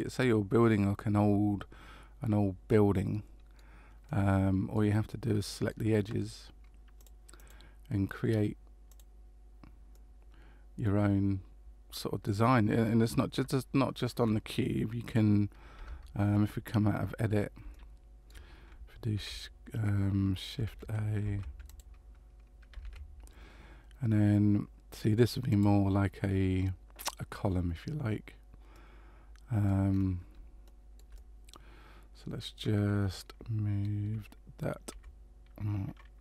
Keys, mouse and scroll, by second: 2.7 middle click, 4.0 middle click, 5.1 shift+middle click, 7.0 click, 7.3 click, 9.9 middle click, 15.7 Tab, 17.7 shift+middle click, 19.1 ctrl+a, 22.8 shift+a, 28.7 middle click, 29.9-30.5 scroll down 3, 30.6 shift+middle click, 31.1 middle click, 34.9 g.